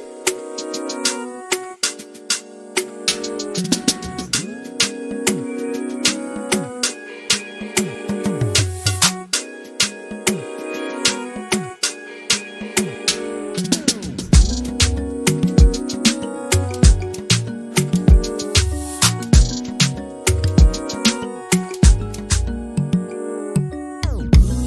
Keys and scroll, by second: 1.0 m, 6.2-7.4 typing, 7.7 Return, 8.5-9.2 typing, 11.0 m, 14.0 Delete, 19.5 m, 24.5-24.6 typing.